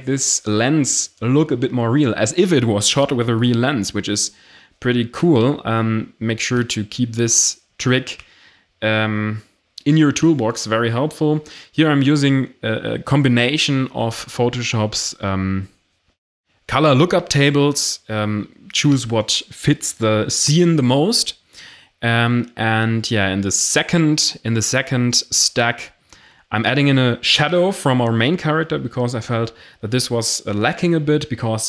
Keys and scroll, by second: 3.6 Delete.